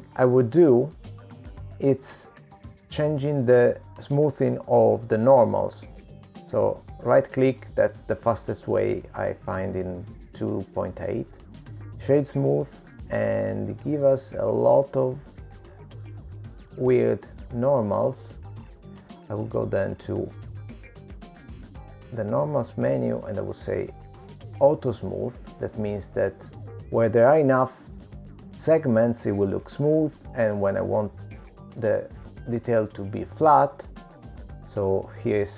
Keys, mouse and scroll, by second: 1.1 click, 1.5 middle click, 2.8 shift+middle click, 3.6 middle click, 4.4-5.2 scroll up 3, 6.4 click, 8.6 right click, 11.4 right click, 15.4 middle click, 23.1 click, 24.5 click, 26.5 click, 28.6 middle click, 32.7 middle click, 34.6 middle click.